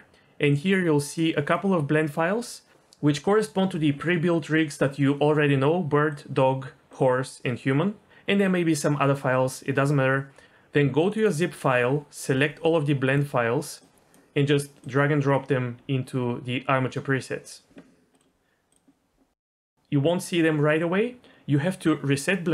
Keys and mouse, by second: 19.5-20.9 drag.